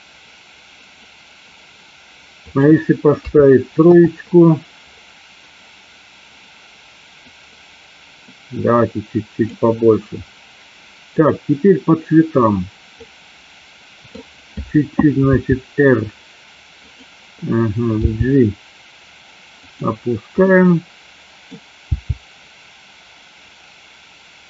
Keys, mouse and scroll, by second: 2.5-4.3 drag, 7.4-9.7 drag, 11.2 click, 13.1-14.3 middle drag, 15.5 r, 16.9 click, 18.2 g, 19.8 click, 20.7 middle click, 21.9 g.